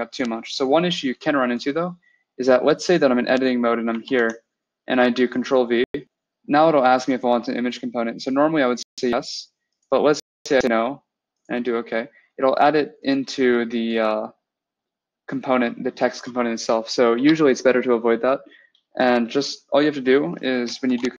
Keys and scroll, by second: 4.0 ctrl+v, 17.0 BackSpace, 20.7 ctrl+v.